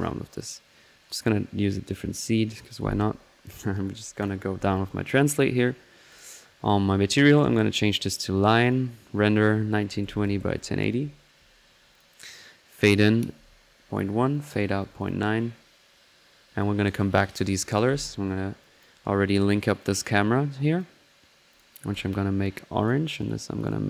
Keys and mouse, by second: 14.3-17.9 drag, 18.6-19.0 drag, 19.0 middle click, 19.8-23.0 drag, 23.2-23.8 drag.